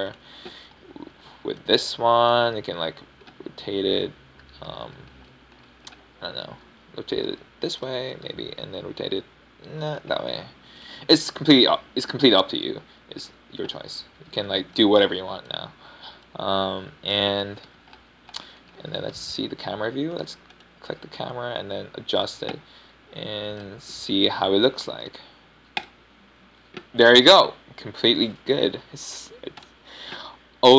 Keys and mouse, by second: 0.8 r, 1.0-2.5 drag, 2.5-3.0 middle drag, 3.0 a, 3.4 b, 5.3 KP_1, 6.7 b, 8.4 ctrl+KP_3, 9.2 r, 10.2 KP_7, 11.0 r, 14.3 a, 14.6-15.7 middle drag, 15.7 KP_1, 16.5 b, 18.1-19.0 drag, 19.6 KP_7, 21.0 KP_0, 23.1 g.